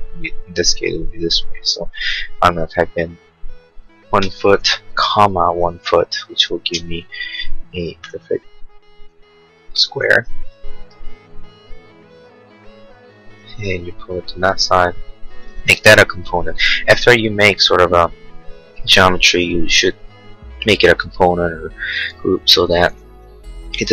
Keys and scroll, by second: 3.8-6.1 typing, 6.7 Return, 8.1 p, 14.5 space.